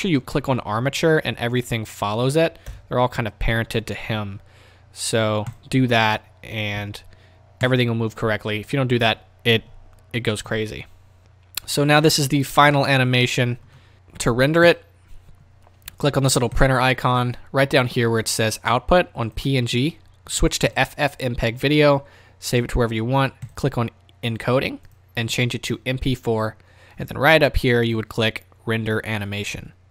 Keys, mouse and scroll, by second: 0.3-0.7 scroll down 2, 1.3-5.6 drag, 2.8 KP_0, 4.2 s, 6.8 s, 7.8 click, 11.2 click, 12.8-20.8 middle drag, 13.9 KP_0, 20.8-29.9 drag.